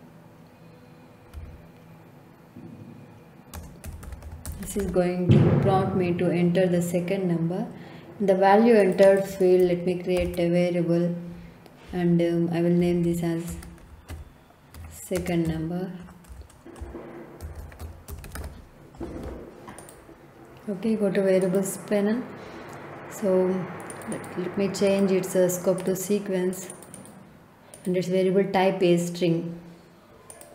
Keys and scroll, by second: 1.3 d, 3.5-5.3 typing, 10.1 ctrl+k, 12.5-18.8 typing.